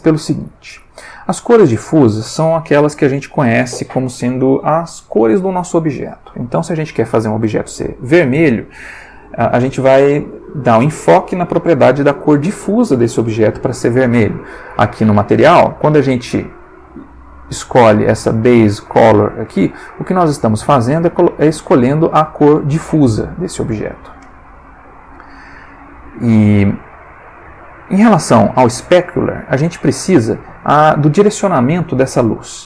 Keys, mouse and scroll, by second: 15.1 click, 25.1 click.